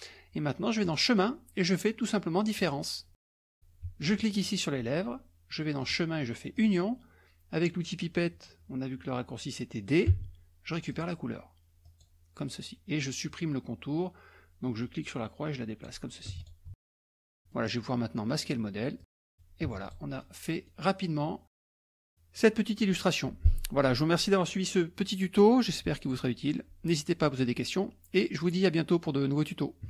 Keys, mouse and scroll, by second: 0.8 click, 2.6 click, 4.0 shift+click, 5.8 click, 6.5 click, 10.2 d, 10.9 click, 11.8 click, 14.8-16.1 drag, 16.3 F1, 16.4 click, 16.8-17.2 ctrl+scroll down 1, 17.2 middle click, 19.0 click, 19.7 F1, 19.8 click, 20.2 middle click, 21.1-21.5 scroll down 1, 21.5 middle click.